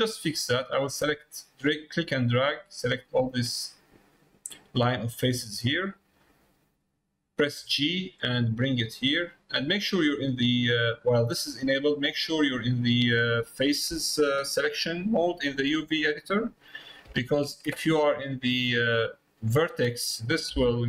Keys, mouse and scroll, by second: 0.0 middle click, 1.0-3.4 drag, 4.7 middle click, 5.6 middle click, 19.1 click.